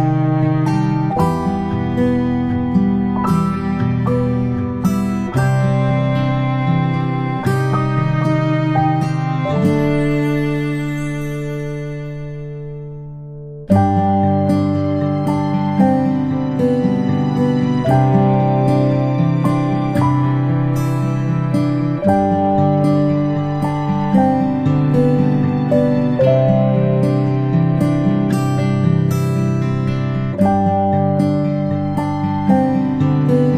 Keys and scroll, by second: 17.2 ctrl+shift+g, 24.5 ctrl+s.